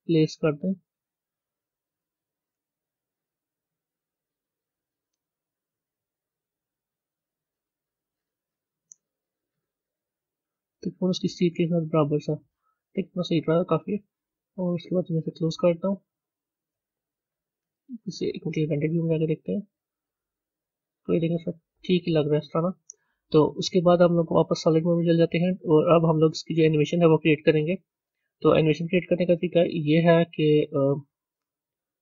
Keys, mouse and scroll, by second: 15.0 click, 16.8 Tab, 20.1 z, 20.3 click, 20.9-25.0 middle drag, 25.0 z, 26.6-32.0 middle drag.